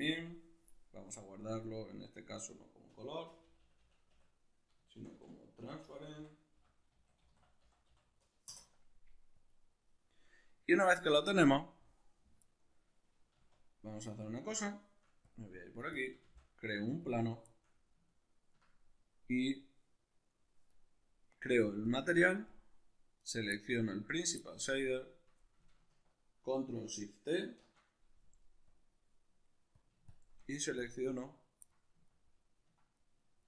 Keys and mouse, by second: 11.4-14.8 middle drag, 14.8 drag, 15.1-15.5 shift+middle drag, 15.5 click, 15.8 shift+a, 17.0-19.8 shift+middle drag, 19.8 right click, 21.5 click, 22.1-22.8 drag, 22.8 right click, 23.1-33.4 middle drag, 27.0 ctrl+shift+t.